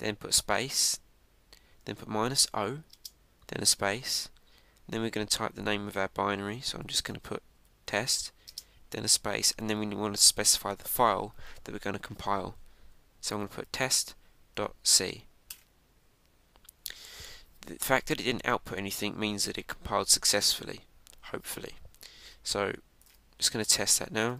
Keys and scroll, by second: 16.4 Return.